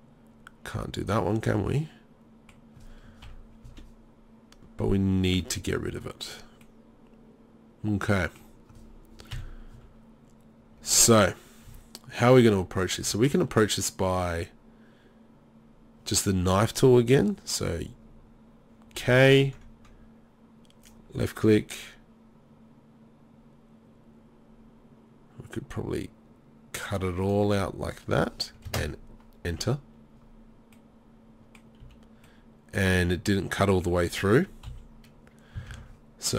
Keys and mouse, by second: 3.3 KP_3, 3.6 z, 5.2 z, 9.3 KP_3, 9.7 z, 11.7 Tab, 13.1 Tab, 19.1 k, 31.8 z, 32.9 z, 34.7 KP_3, 35.7 ctrl+z.